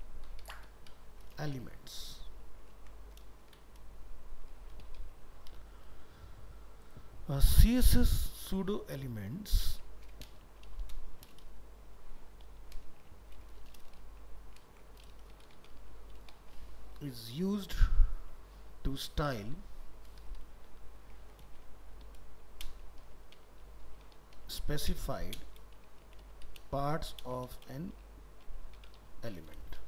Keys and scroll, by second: 2.7 ctrl+Left, 9.2 ctrl+Left, 12.9 ctrl+shift+Right, 14.7 ctrl+shift+Left.